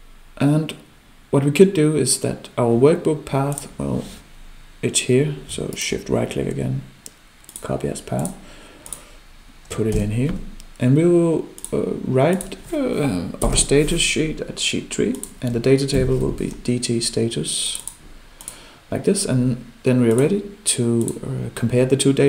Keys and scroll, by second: 9.9 ctrl+v.